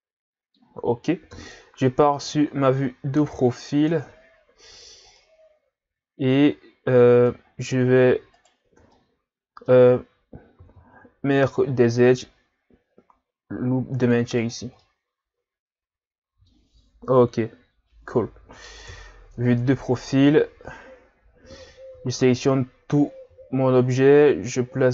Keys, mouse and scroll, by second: 1.3 KP_3, 3.9 Tab, 5.2-7.5 middle drag, 7.5 scroll up 2, 7.7 Tab, 8.1 Tab, 8.3 right click, 8.7 Tab, 9.0-10.6 middle drag, 10.6 ctrl+r, 14.8-17.8 middle drag, 18.9 KP_3, 19.4 Tab, 20.0 Tab, 21.9 a, 22.3 a, 23.3 g.